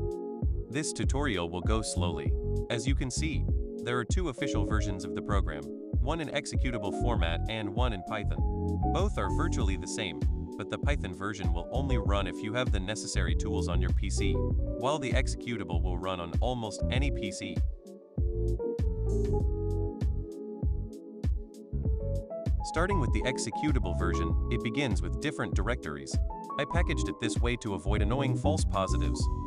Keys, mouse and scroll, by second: 10.1 click, 14.5 click, 14.7 click, 27.0 click, 27.2 click.